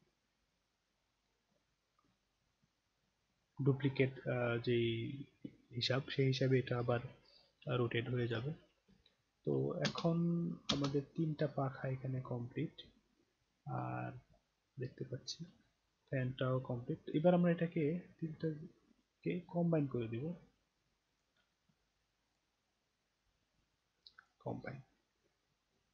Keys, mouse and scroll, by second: 5.8 middle click, 6.4 middle click, 7.0-7.4 alt+middle drag, 8.2 click, 9.0 alt+middle click, 9.8 space, 10.6 space, 11.1 scroll up 1, 11.9-12.3 alt+scroll up 1, 12.6-15.3 alt+drag, 15.4 scroll up 1, 16.0 scroll up 1, 16.4 alt+click, 17.3-17.6 alt+scroll up 1, 18.3 click, 19.0 click, 20.4 alt+click, 22.3 click, 24.2 click, 24.9 middle click.